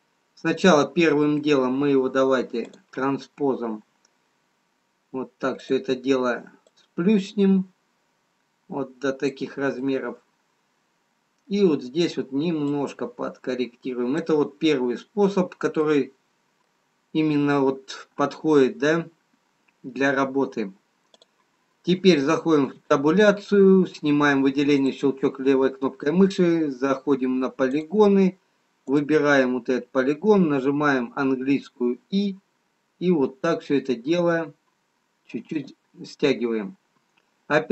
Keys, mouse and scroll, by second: 2.9 click, 4.9-5.7 scroll up 1, 5.7 click, 5.7-6.9 scroll up 1, 6.9 click, 9.7 middle click, 13.7 click, 16.3 middle click, 16.3-18.0 scroll up 3, 21.1 click, 23.1 Tab, 24.7 click, 29.2 click, 31.0 i.